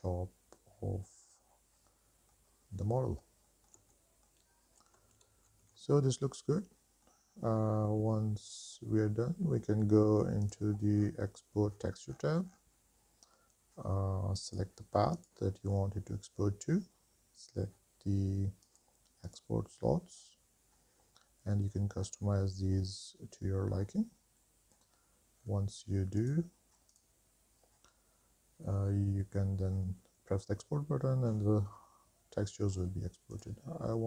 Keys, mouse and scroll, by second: 2.7 scroll down 2, 3.2 middle click, 3.7 shift+middle click, 4.2 middle click, 5.7 ctrl+s, 6.7 middle click, 8.2-9.0 scroll down 6, 10.6 click, 11.1-12.0 scroll down 2, 12.3-13.7 scroll down 4, 14.6-19.0 drag, 19.5 click, 20.3-20.9 scroll down 2, 22.1 scroll down 4, 23.7-25.4 scroll up 2, 25.5-26.2 scroll down 1, 26.2 scroll down 1, 26.3 click, 33.5-34.0 drag.